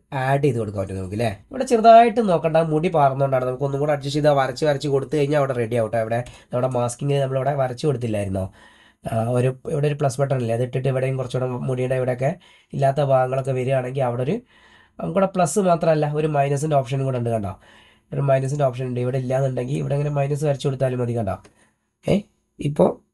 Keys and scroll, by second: 6.4 space.